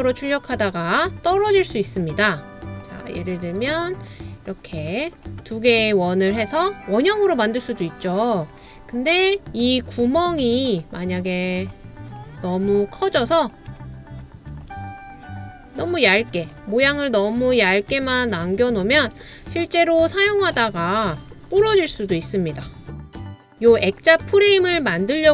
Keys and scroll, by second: 21.9 l.